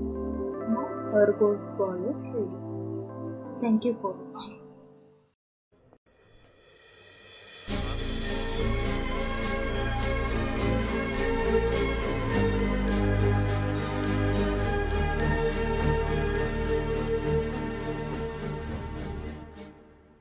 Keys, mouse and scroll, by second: 0.1 click, 2.7 middle click, 4.9 middle click.